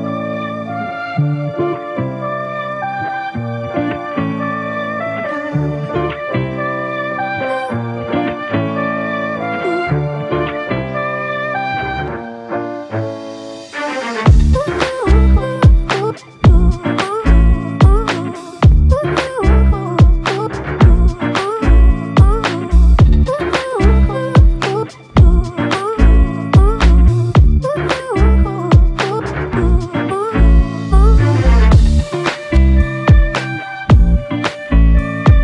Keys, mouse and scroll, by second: 3.2 shift+click, 6.0 ctrl+click, 8.7 shift+click, 10.7 alt+click, 12.7 f, 15.2 double click, 17.7 shift+click, 22.5 alt+click, 23.3 shift+click, 26.0 alt+click, 29.0 ctrl+alt+click, 31.7 double click, 33.7 alt+click, 35.1 ctrl+click.